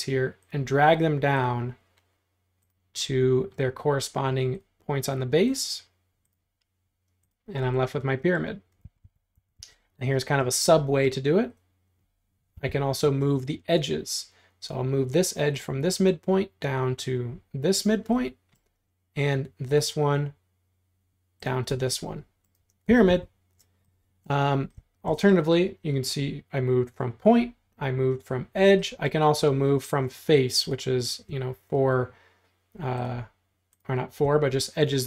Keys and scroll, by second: 8.9 super+z, 9.1 super+z, 10.5 space, 12.6 m, 21.7 space, 22.9 super+z.